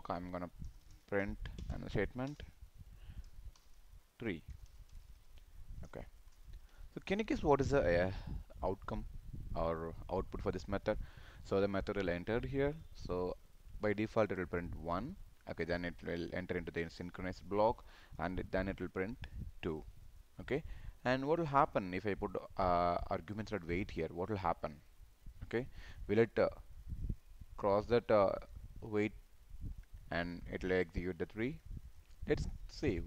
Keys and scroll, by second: 1.9 ctrl+space, 6.2 ctrl+shift+f, 6.5 ctrl+s.